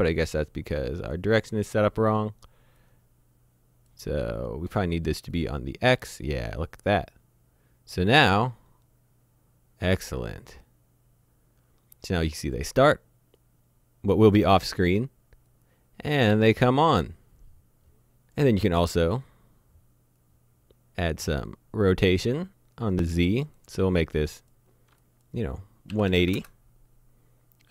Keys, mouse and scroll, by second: 2.8 click, 5.4 click, 20.2 click, 23.5 click, 25.9 KP_1, 26.1 KP_8, 26.2 KP_0, 26.3 KP_Enter.